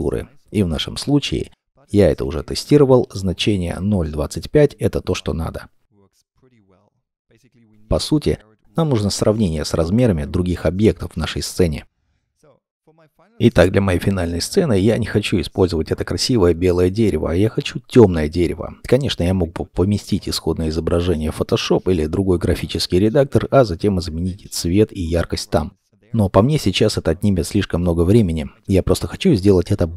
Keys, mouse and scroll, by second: 2.1 ., 2.1 0, 2.5 2, 2.7 5, 3.0 Return, 5.6-6.3 scroll down 1, 6.3 middle click, 7.2 scroll down 1, 12.5 middle click, 18.8 scroll down 1, 19.0 scroll up 1, 28.9-29.6 scroll down 1, 29.6 middle click.